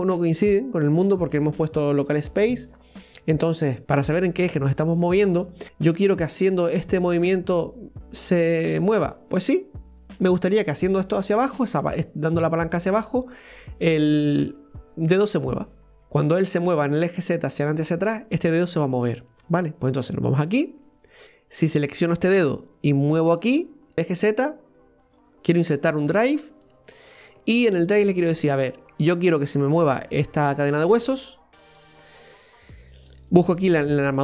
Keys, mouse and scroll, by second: 3.8 click, 5.7-9.7 drag, 20.4 right click, 23.4-25.2 drag, 25.2-28.1 right drag, 31.0-34.0 right drag.